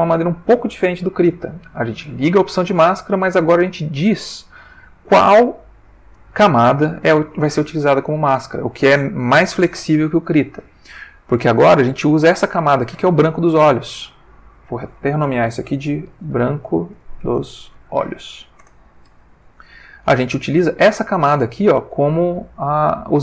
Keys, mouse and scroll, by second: 3.7 click, 14.4 click, 15.9-18.3 typing, 18.6 shift+Return.